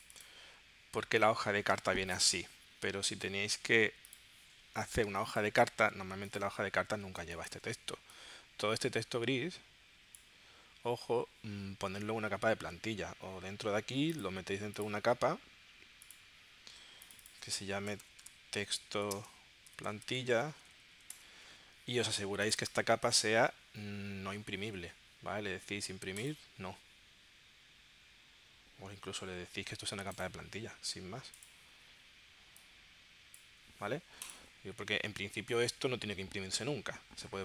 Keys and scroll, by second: 5.1 space, 7.3 space, 17.6-21.5 typing.